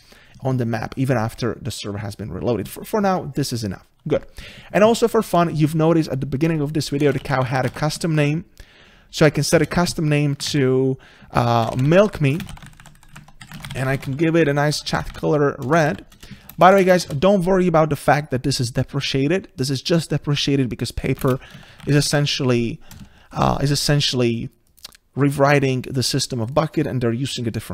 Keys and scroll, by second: 9.6 Return, 15.3 Return, 21.4 ctrl+space.